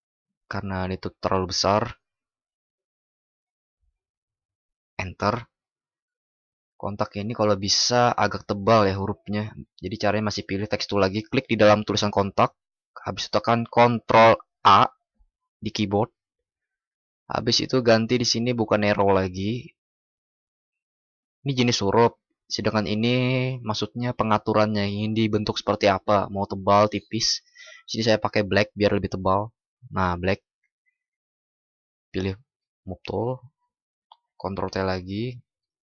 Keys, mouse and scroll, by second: 14.4 ctrl+shift+@.